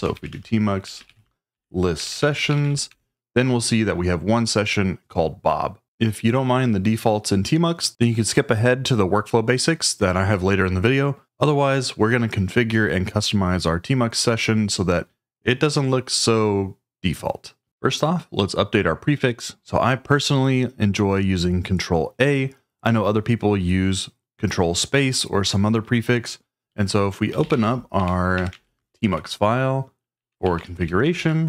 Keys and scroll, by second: 0.0-3.1 typing, 27.0-28.7 typing, 29.9-31.3 typing.